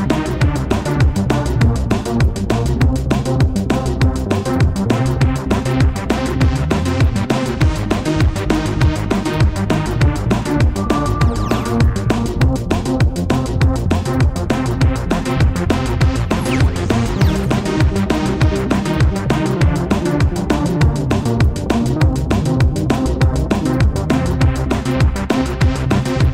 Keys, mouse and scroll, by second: 2.7 0, 2.8 Return, 23.3 shift+click.